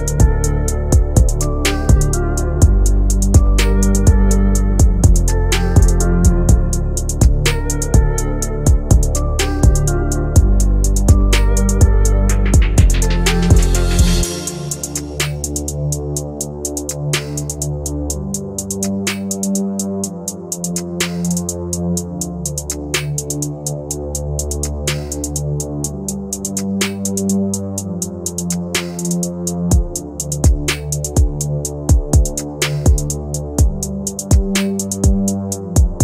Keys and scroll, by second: 9.6 F3, 10.3 Escape, 23.3 Delete.